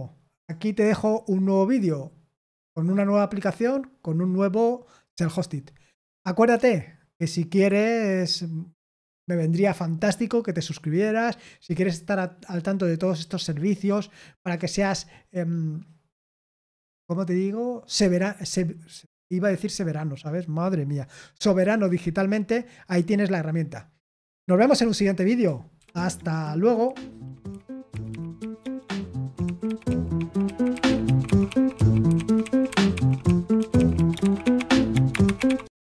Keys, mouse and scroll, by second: 25.7 super+x.